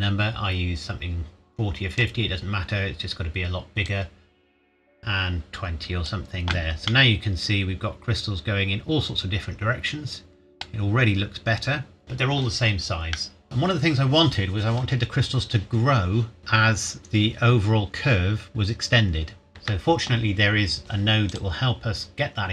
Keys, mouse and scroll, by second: 6.9 middle click, 9.5-10.6 scroll up 1, 13.1 middle click, 13.4 scroll up 1, 15.9 scroll down 1, 16.4 click, 19.5 ctrl+s, 21.3 click.